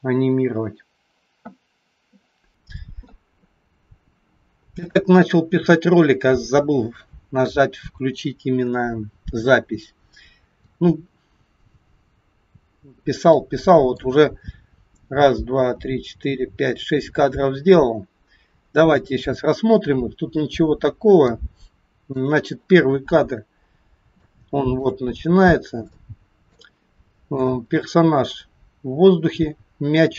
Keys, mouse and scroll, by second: 2.5 KP_1, 2.5 KP_3, 12.9-13.8 scroll down 3, 13.4 middle click, 19.3 click, 23.1-23.9 scroll up 3, 23.9-24.2 scroll down 1, 24.2 shift+middle click, 25.0 scroll down 1, 26.0 shift+middle click, 28.5-30.1 scroll up 3.